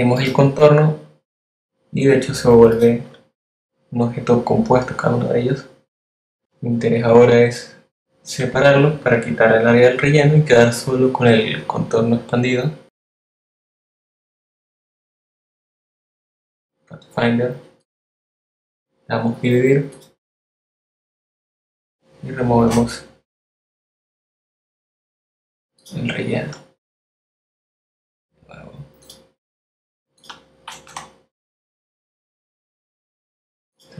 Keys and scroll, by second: 22.4 BackSpace, 30.8 BackSpace.